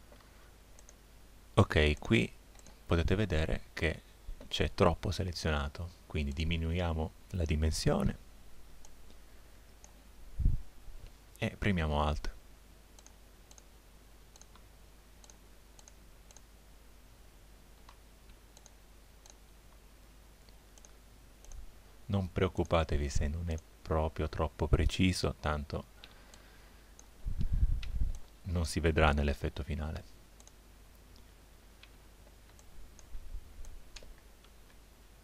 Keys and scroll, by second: 0.2 z, 26.1 space, 31.9 space, 34.7 z.